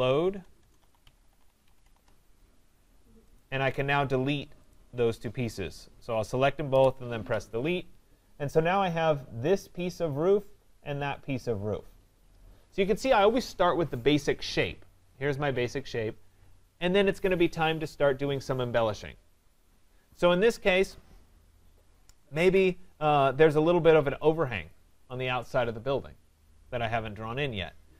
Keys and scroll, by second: 0.4 BackSpace, 6.7 Delete.